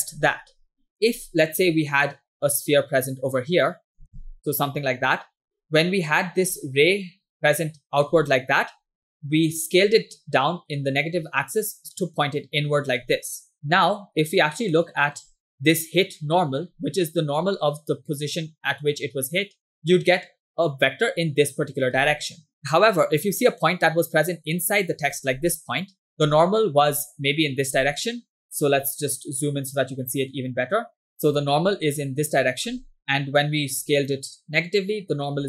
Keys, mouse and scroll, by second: 2.6 click, 4.0 ctrl+z, 4.3 click, 7.3 click, 7.9 click, 11.2 click, 11.8-13.1 drag, 14.8 shift+middle click, 15.2-16.8 scroll up 3, 21.0-22.0 drag, 24.0 click, 26.2 ctrl+click, 27.5 ctrl+click, 29.4-30.2 scroll up 2, 30.4-30.7 scroll down 1, 30.9 scroll up 1, 31.2-32.2 scroll down 1.